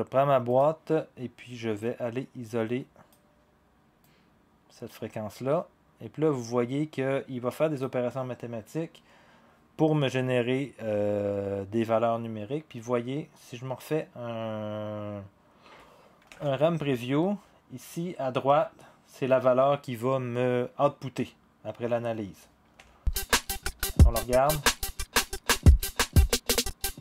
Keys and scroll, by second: 16.3 0.